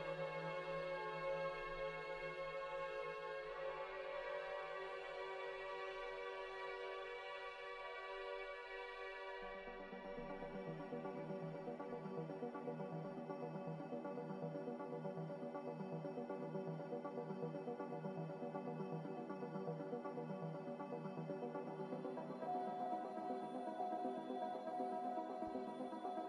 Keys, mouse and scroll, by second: 0.2 z, 1.8-2.7 typing, 3.5 Escape, 3.7 Escape, 3.9 Escape, 4.8 v, 6.9-7.8 typing, 12.5 1, 12.8 Return, 12.8 0, 19.3 z, 20.8-22.2 typing, 24.5-25.4 typing.